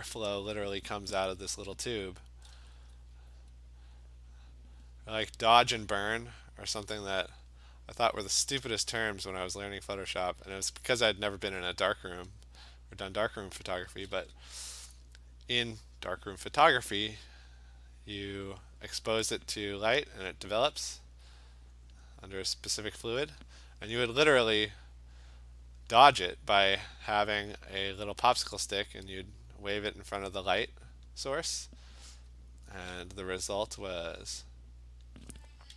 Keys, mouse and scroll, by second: 1.0 [, 1.2 [, 1.5 [, 2.9 alt+click, 6.5 click, 7.5 click, 7.8 click, 8.0 alt+click, 9.0 click, 10.3 click, 11.9 click, 12.8 alt+click, 12.9 alt+click, 13.2 click, 13.8 click, 13.9 [, 14.2 [, 16.4 click, 18.5 click, 19.0 click, 20.0 click, 20.6 click, 21.2 alt+click, 21.5 alt+click, 22.0 click, 23.3 click, 25.9 click, 26.6 click, 27.2 click, 27.9 click, 29.0 click, 29.9 click, 31.1 click, 31.7 alt+click, 31.9 alt+click, 32.3-32.9 [, 34.2 click, 35.1 click, 35.1 alt+click.